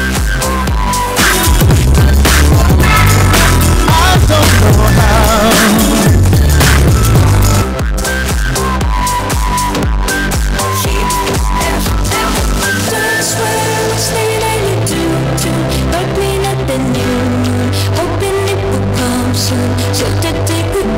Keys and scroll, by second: 7.5 Page_Down.